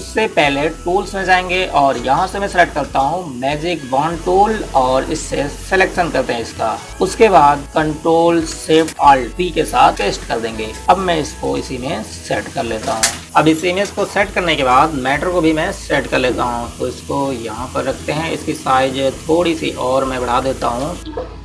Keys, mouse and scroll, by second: 4.8 click, 10.8 v, 12.2 click, 17.0 click.